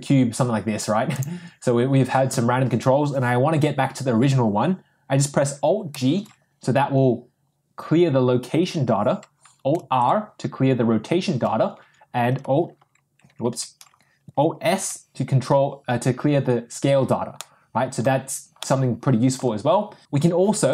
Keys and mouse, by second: 5.9 alt+g, 9.9 alt+r, 14.6 alt+s, 17.3-18.5 middle drag, 18.8-20.5 middle drag.